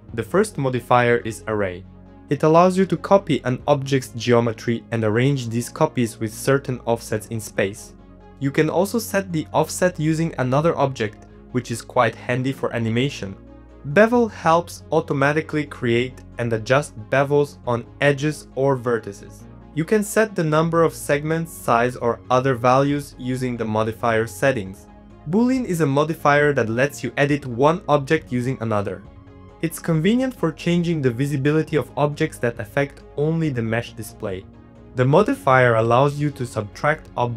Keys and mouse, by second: 0.0 shift+middle click, 0.9 click, 1.2 shift+middle click, 2.1 shift+click, 2.7 middle click, 3.6-4.8 drag, 4.8 click, 5.8 ctrl+z, 5.9 shift+middle click, 6.3 shift+middle click, 7.1 click, 7.8 click, 8.2 click, 8.8 click, 9.6 click, 9.9 middle click, 10.1 g, 10.7 g, 11.0 middle click, 11.0 z, 11.2 g, 13.1 middle click, 13.4 middle click, 13.7 middle click, 14.1 shift+middle click, 15.0 click, 15.3 middle click, 16.7 click, 17.2 middle click, 17.3 shift+middle click, 18.3 click, 18.6 shift+middle click, 19.2 middle click, 21.2 click, 21.7 click, 22.7 click, 23.9 shift+click, 24.2 right click, 25.0 middle click, 25.7 shift+middle click, 26.0 middle click, 27.7 click, 30.4 middle click, 31.6 click, 32.2 click, 32.8 click, 33.0 middle click, 33.2 middle click, 33.6 click, 33.8 s, 35.9 middle click, 36.2 shift+middle click.